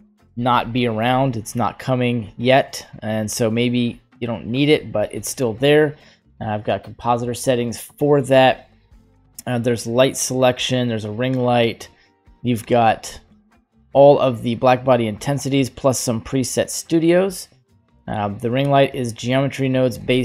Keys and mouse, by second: 6.4 click, 6.8 click, 8.5 click, 11.2-11.8 drag, 12.5-13.2 typing, 12.9-17.8 drag, 19.6 click.